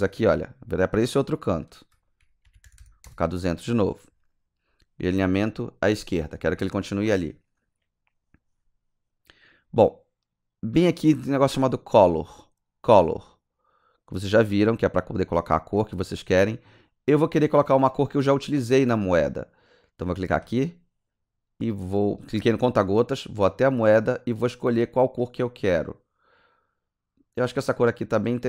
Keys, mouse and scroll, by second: 1.6 click, 2.4 KP_2, 2.6 KP_0, 3.0 Return, 3.8-4.5 scroll down 6, 5.4 click, 15.0 click, 20.4 click.